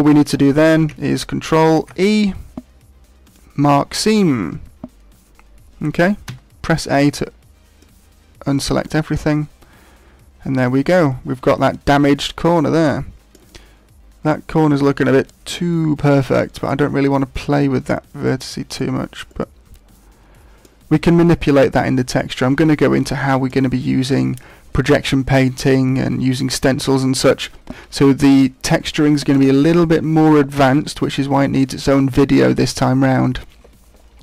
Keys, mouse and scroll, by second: 1.7 ctrl+e, 6.2 a, 7.1 middle click, 8.1-8.9 scroll down 7, 8.8 middle click, 18.2 middle click, 19.2 middle click, 22.1 middle click.